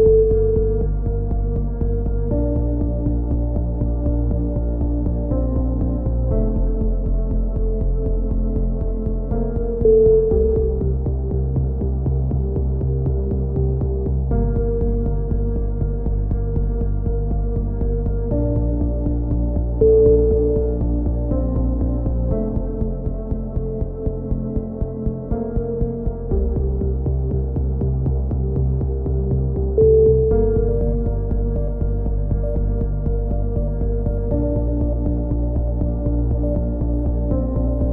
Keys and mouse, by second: 0.0-2.1 typing, 0.2 click, 1.1 click, 4.5 a, 4.6 z, 4.8 click, 5.6 KP_3, 5.7 z, 6.4-8.3 drag, 6.4 right click, 8.8 click, 8.8 right click, 9.1 a, 9.3 Tab, 9.5 z, 9.6-11.9 drag, 11.3 KP_3, 12.4 Tab, 12.6 z, 12.8-14.1 right drag, 13.3 e, 15.8 a, 16.6 right click, 16.7 e, 17.8 x, 18.2-19.2 right drag, 18.4 e, 19.6 KP_7, 21.5 KP_3, 22.3 right click, 22.5 f, 22.6 a, 22.7 right click, 23.2 click, 23.8 right click, 24.1 click, 24.9 click, 24.9 right click, 25.7 KP_7, 27.8 a, 28.2 z, 28.4-29.9 drag, 30.8 KP_3, 31.0 z, 31.5 ctrl+r, 32.0 click, 33.0-34.5 right drag, 33.4 f, 34.4 f, 34.5 a, 34.6 z, 34.7 click, 35.6 right click, 36.0 click, 37.0 a, 37.1 Tab, 37.4 KP_7, 37.6 z.